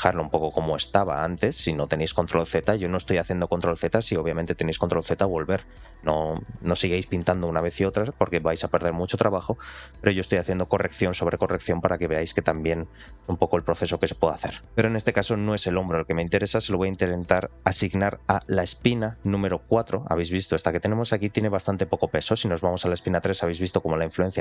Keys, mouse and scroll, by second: 0.4 middle click, 1.0 shift+middle click, 9.2 middle click, 9.7 shift+middle click, 10.1 middle click, 14.4 shift+middle click, 14.9 middle click, 18.4 ctrl+click, 19.2 middle click, 21.7 ctrl+click, 22.2 shift+middle click, 22.7-23.7 scroll down 2.